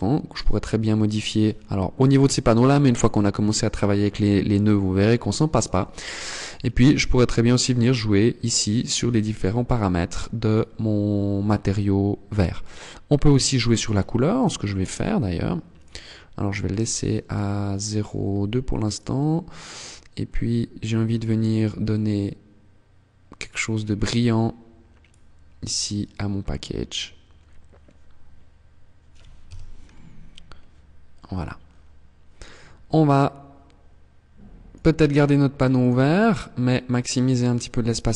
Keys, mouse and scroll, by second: 5.6 click, 7.8 click, 8.7 click, 12.7 click, 13.5 click, 14.9 click, 15.9 click, 16.6 click, 18.0 click, 33.7 click, 35.3-36.4 scroll down 7, 37.4 KP_0.